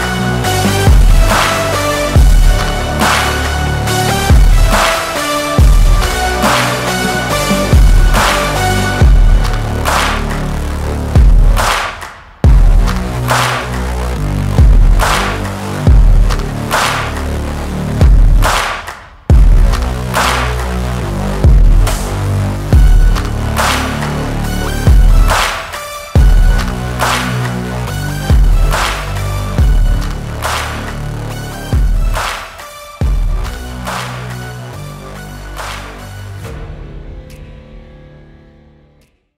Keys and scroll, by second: 0.7 ctrl+z, 2.2 ctrl+t, 5.4 Return, 9.2 ctrl+t, 12.6 Return, 13.0 Right, 22.8 8, 23.1 Return, 27.4 BackSpace.